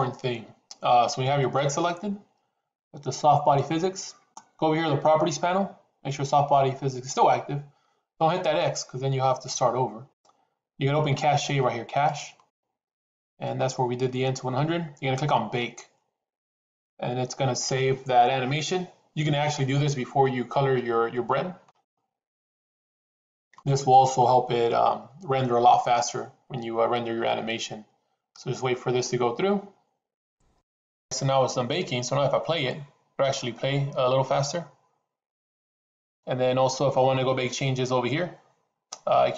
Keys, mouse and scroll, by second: 11.8 click, 15.4-30.4 drag, 32.5 click.